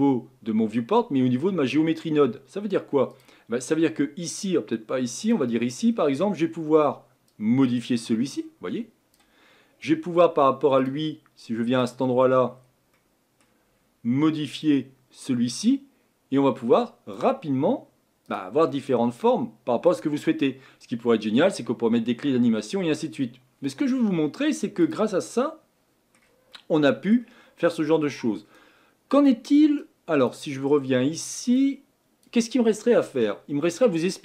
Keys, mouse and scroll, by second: 7.5-34.2 drag.